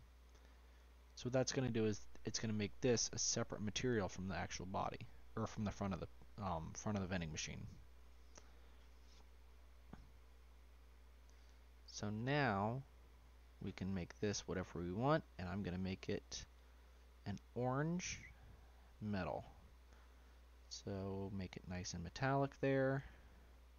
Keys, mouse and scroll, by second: 0.4-0.9 scroll down 1, 0.9-3.6 shift+middle drag, 3.6 scroll up 2, 3.9-5.3 middle drag, 5.3 shift+click, 7.6-10.2 shift+drag, 10.2 scroll down 3, 10.4 middle click, 11.1-12.2 scroll up 1, 12.2 click, 12.7 middle click, 13.0-14.9 scroll down 2, 14.9-15.8 scroll down 2, 16.5 click, 19.2-20.2 scroll down 3, 20.2-22.0 drag, 22.5 click.